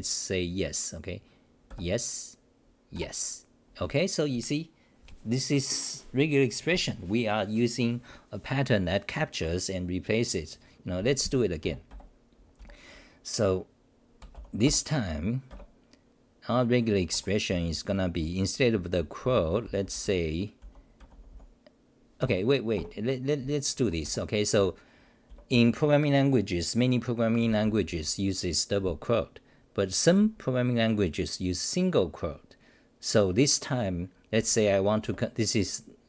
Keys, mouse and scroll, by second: 11.6 f, 11.9 f, 12.6 c, 15.5 Up, 17.1 Home, 17.5-21.6 typing, 22.2 ctrl+g, 23.7 ctrl+g, 23.8 Home, 24.0-26.0 typing, 27.9 n, 35.0 6.